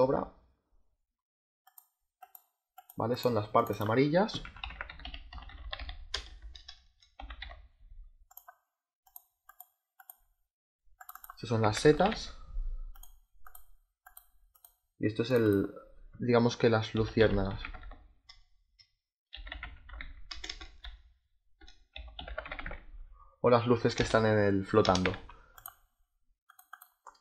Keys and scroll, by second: 4.1-7.8 typing, 11.3-12.4 typing, 16.6-20.2 typing, 21.6-23.9 typing, 24.9 s.